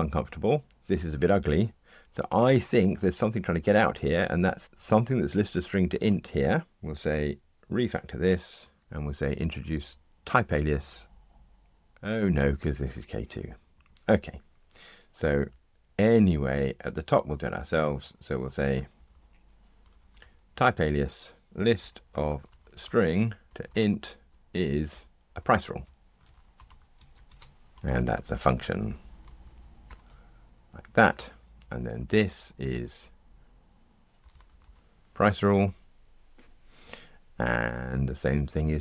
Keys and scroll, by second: 8.8 ctrl+t, 20.7 Tab, 31.6 alt+Up, 35.5 Return.